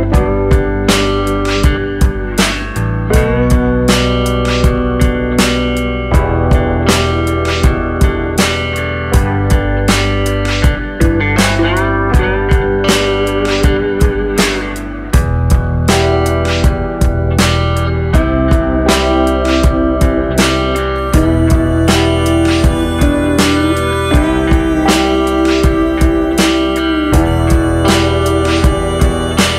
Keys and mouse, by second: 1.7 middle click, 3.5-4.0 drag, 4.0 middle click, 8.0-9.5 drag, 9.8 middle click, 12.6 middle click, 13.0 Tab, 15.2 middle click, 16.5 click, 18.9-20.2 middle drag, 21.9 middle click, 22.9 click, 23.9-24.2 middle drag, 24.7 Tab, 25.1-25.8 middle drag, 26.3-27.0 middle drag, 27.3 middle click, 28.0 middle click, 28.4 Tab, 28.7 middle click.